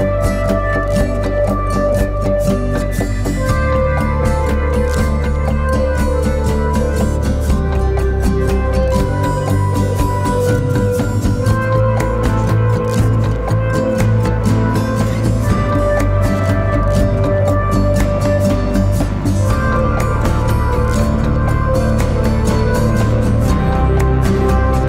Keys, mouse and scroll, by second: 18.7 ctrl+=, 18.8 ctrl+=, 20.7-21.4 typing.